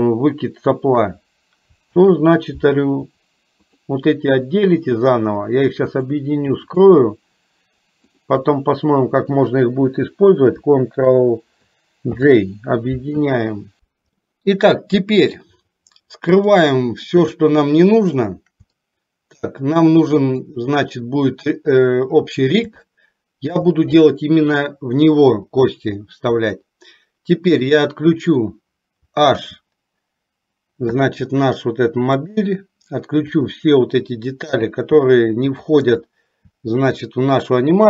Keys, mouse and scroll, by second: 2.0 ctrl+z, 3.8 shift+click, 6.0 shift+click, 6.8 shift+click, 8.2 shift+click, 12.1 ctrl+j, 14.4 middle click, 16.5 click, 18.1 shift+click, 20.5 click, 23.0 shift+middle click, 29.5 h, 32.3 click, 33.4 click, 34.6 h, 35.9 click, 36.8 h.